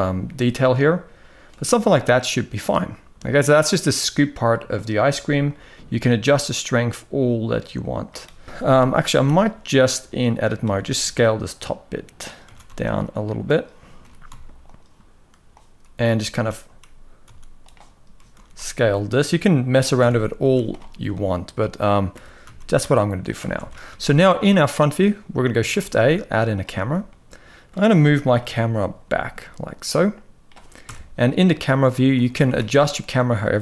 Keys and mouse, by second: 5.3-7.7 shift+drag, 8.4 Tab, 8.8 z, 9.5 click, 10.5 s, 12.1 s, 13.7 g, 15.3 click, 16.0 s, 18.0 s, 19.7 Tab, 20.1 z, 21.8 g, 23.2 alt+a, 23.5 ctrl+s, 23.6 ctrl+s, 24.0 shift+middle drag, 25.4 shift+a, 26.8-27.4 middle drag, 28.1 KP_3, 28.7 g, 30.5 KP_0, 31.1 g, 31.9 g.